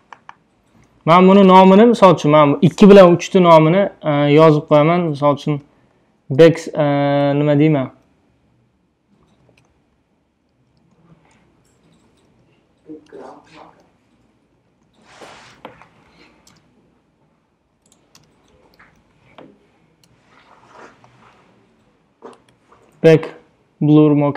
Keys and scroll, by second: 1.4 BackSpace, 5.5 shift+b, 5.9 a, 6.7 c, 7.6 BackSpace, 9.3 BackSpace, 10.5-13.1 typing, 14.6-16.6 typing, 17.8-21.8 typing, 22.5 Return.